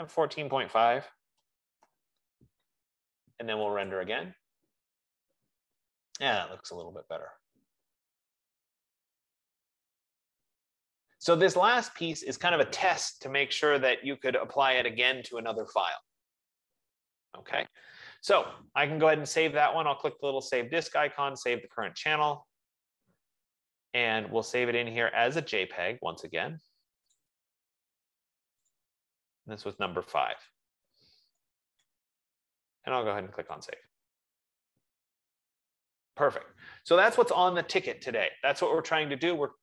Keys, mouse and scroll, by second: 1.6-2.8 typing, 2.7 click, 4.9-9.4 drag, 20.6 click, 22.2 click, 22.8 F15, 25.8 click, 27.5 click, 28.9 click, 30.4 click, 30.9 click, 31.6-32.0 typing, 34.1 click, 34.1 typing.